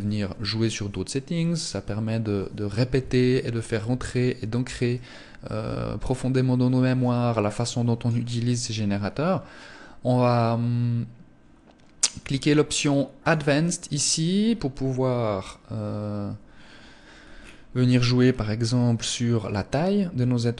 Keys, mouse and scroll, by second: 4.2 click, 12.5 click, 16.6 scroll down 2, 17.5 scroll down 5, 18.8 click, 18.8-19.2 scroll down 2.